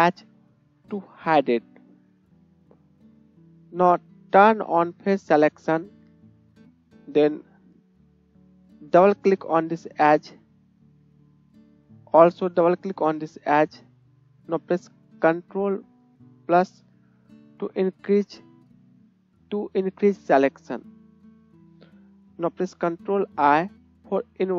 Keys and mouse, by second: 0.1 h, 2.6-5.8 middle drag, 5.8-9.1 drag, 9.1 middle click, 9.2-10.2 drag, 10.2-13.2 shift+middle drag, 13.2 shift+click, 13.3-20.7 shift+middle drag, 16.8 ctrl+KP_Add, 17.0 ctrl+KP_Add, 17.6 ctrl+KP_Add, 23.5 ctrl+i, 23.8-24.5 middle drag.